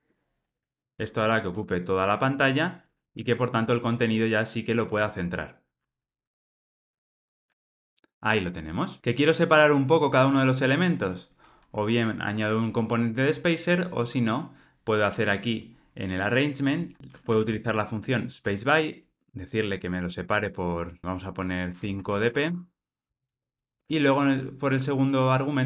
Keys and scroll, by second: 0.7 Return, 3.6 alt+Return, 18.7 Return, 23.2 alt+Return, 23.8 super+p.